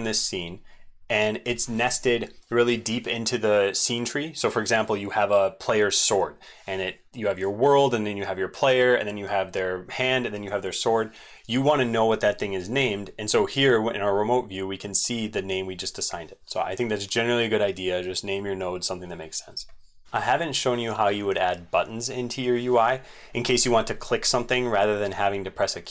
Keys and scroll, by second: 5.3 c, 9.3 c, 10.9 ctrl+v, 20.0 ctrl+c, 20.2 ctrl+c.